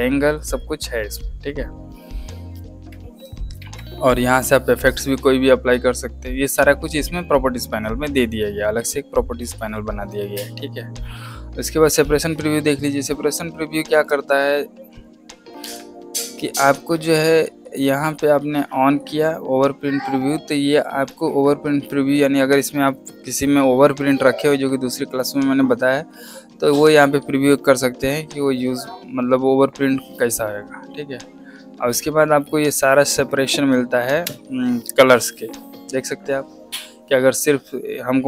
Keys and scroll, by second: 3.5 ctrl+z, 14.0 space.